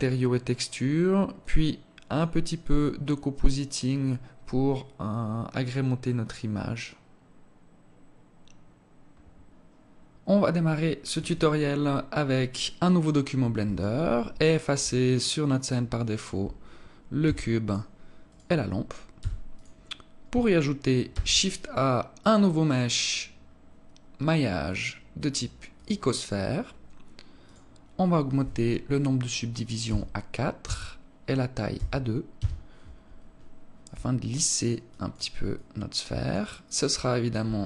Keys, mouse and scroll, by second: 14.9 alt+click, 16.0 alt+click, 17.3 x, 18.3 right click, 19.2 x, 21.1 shift+a, 27.4 click, 34.1 alt+click, 34.8 alt+click.